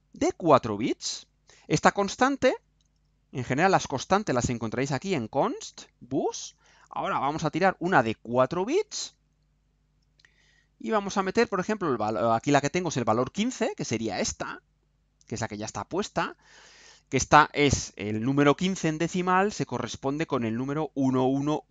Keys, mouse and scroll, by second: 13.3 click, 14.9 click.